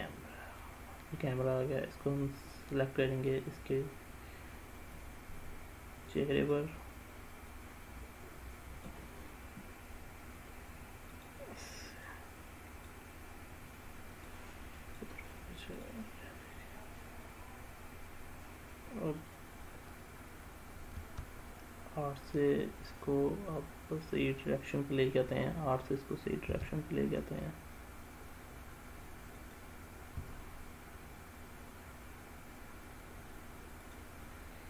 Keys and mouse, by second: 0.0-1.2 drag, 5.1-6.5 drag, 7.5-8.9 drag, 9.3-10.7 s, 11.2 click, 12.2 click, 14.3-15.0 drag, 15.8 drag, 21.0 r, 26.5 r, 29.4 click, 30.2 r, 33.8 click.